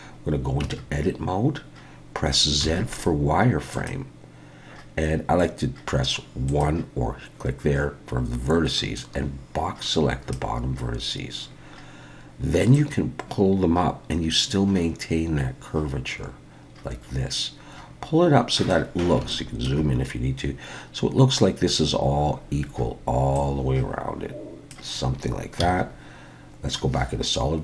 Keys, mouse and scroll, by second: 0.6 Tab, 2.6 z, 6.5 click, 9.0 click, 10.8-11.4 scroll up 1, 11.4 scroll down 1, 11.5-12.7 scroll down 2, 12.7 click, 19.0 scroll up 3, 19.3 shift+middle click, 20.4-21.8 scroll up 2, 23.4 click, 25.6 z.